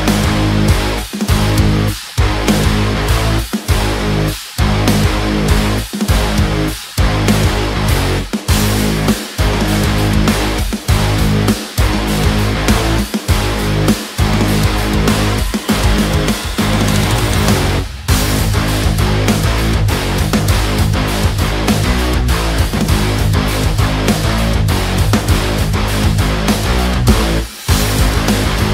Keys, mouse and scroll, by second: 0.7 ctrl+space, 0.9 ctrl+click, 4.9-6.7 drag, 7.5-9.6 drag, 10.0 click, 10.0 b, 11.2 right click, 14.1-15.2 scroll up 1, 15.2 click, 15.6-16.0 scroll up 1, 16.0 click, 18.7 click, 19.3-23.7 drag, 25.9 click, 26.0 click, 28.0 space.